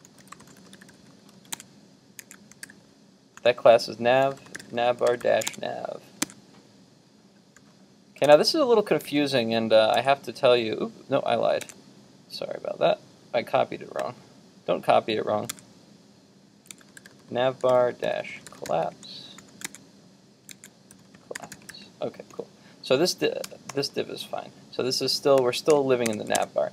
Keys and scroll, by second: 1.6 super+Tab, 5.5 super+Tab, 6.4 super+Tab, 10.1 super+Tab, 11.8 super+Tab, 15.5 super+Tab, 26.4 super+Tab.